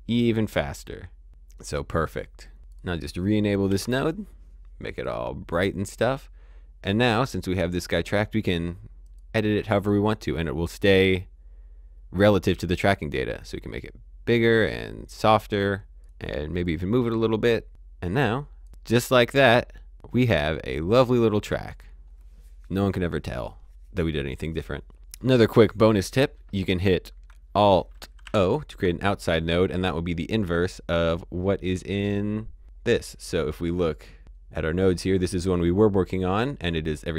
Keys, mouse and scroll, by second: 2.6 click, 3.6 ctrl+d, 4.8 click, 7.5 click, 12.8 click, 16.1 click, 24.9 click, 27.2 alt+Num_Lock, 28.2 alt+o, 33.0 click, 33.7 click, 33.9 middle click.